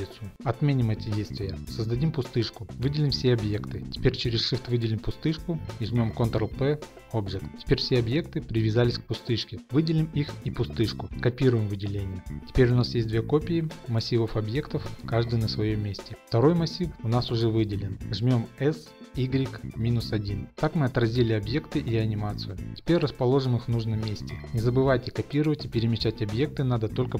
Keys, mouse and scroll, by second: 0.4 ctrl+Left, 1.7 shift+right click, 1.7 a, 2.6 click, 2.7 shift+middle click, 3.8 click, 4.7 shift+click, 6.1 ctrl+p, 7.2 click, 9.0 right click, 9.0 g, 10.2 right click, 10.5 shift+click, 10.9 shift+middle click, 11.2 shift+d, 11.4 g, 11.5 y, 12.2 click, 12.4 scroll, 19.1 s, 19.1 y, 20.9 typing, 21.0 Return, 27.0 Left.